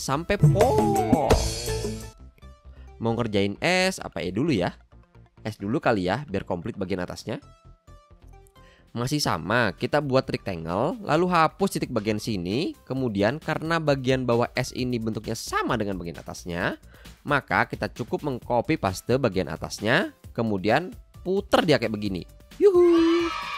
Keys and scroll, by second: 1.6 v, 11.7 a, 13.6 BackSpace, 18.7 super+c.